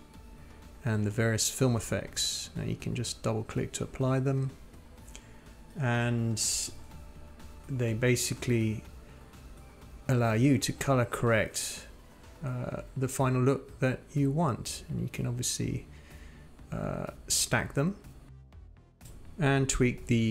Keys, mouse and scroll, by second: 1.0 click, 8.1-9.8 drag, 9.8 click, 10.5 click, 11.2-13.3 drag, 13.3-18.0 drag, 19.6-20.3 drag.